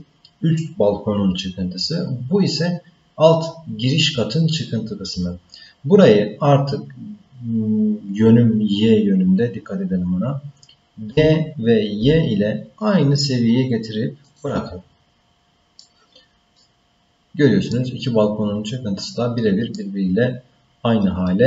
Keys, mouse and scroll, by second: 3.8-4.6 scroll up 2, 11.1 g, 15.8 middle click, 16.8 scroll down 5, 17.7-19.8 middle drag.